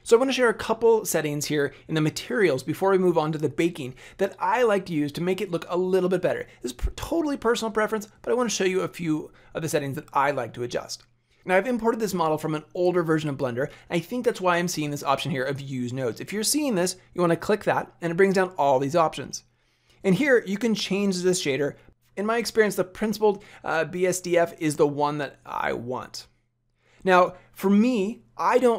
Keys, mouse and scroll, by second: 17.2 click, 20.0 click.